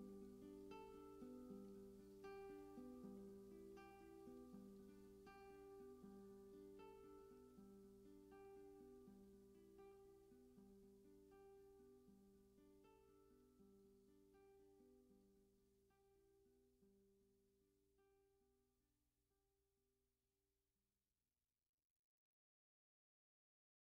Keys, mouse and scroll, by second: 0.0-1.2 drag, 1.2 ctrl+s, 2.5 click, 4.0-12.0 drag, 12.0 ctrl+s, 14.1-16.2 alt+drag, 19.2-24.0 drag.